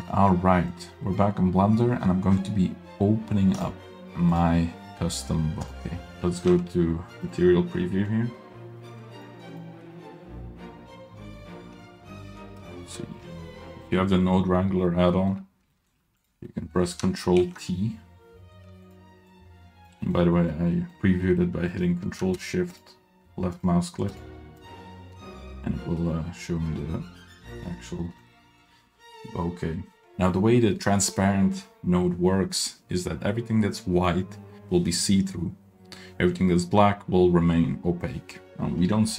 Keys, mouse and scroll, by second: 0.0 click, 0.8 click, 3.6 click, 6.1 click, 6.3 middle click, 6.6 z, 7.8-8.2 middle drag, 8.4-9.0 middle drag, 9.1 drag, 9.6 click, 11.8 scroll down 2, 12.0 middle drag, 12.8 ctrl+shift+click, 13.8-14.1 scroll up 1, 14.1 middle click, 15.1 middle click, 15.3-15.7 scroll up 1, 15.7 middle click, 16.2 click, 16.5 middle click, 17.6 ctrl+t, 18.9 click, 19.3 click, 20.0 middle click, 20.5 middle click, 21.2 scroll down 1, 21.2 middle click, 21.4 scroll up 1, 21.7 middle click, 23.0 ctrl+shift+drag, 23.7 ctrl+shift+click, 24.7-25.2 ctrl+shift+drag, 26.0-26.8 middle drag, 27.6-28.2 middle drag, 29.1 middle click, 38.5 middle click.